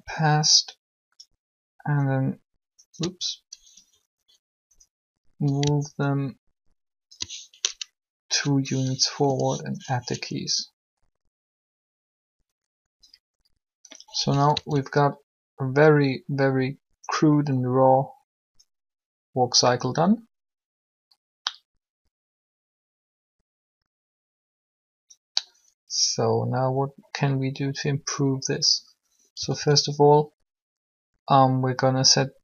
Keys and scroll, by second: 9.2 i, 14.4 alt+a, 29.1 a, 29.4 a.